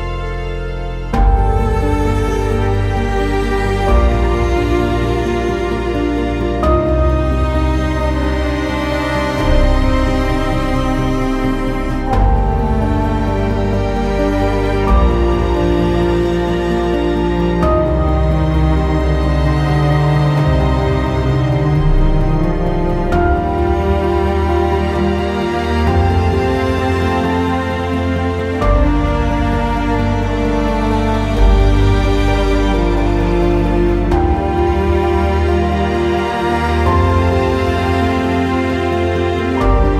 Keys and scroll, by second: 0.5-1.2 typing, 18.6 r, 22.4 w, 35.0 ctrl+z, 35.4 r.